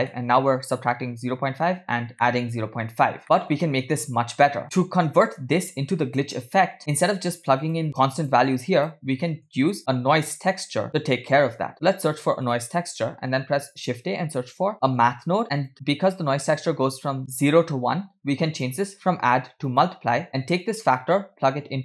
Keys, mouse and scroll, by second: 0.1 middle click, 0.6-0.9 scroll up 1, 2.1 middle click, 3.2 middle click, 4.6 middle click, 4.6-5.0 scroll down 2, 6.8 click, 6.8 middle click, 7.7 click, 8.2 click, 9.3 middle click, 9.7 shift+a, 13.1 shift+a, 18.7-20.0 drag, 20.7-21.8 drag.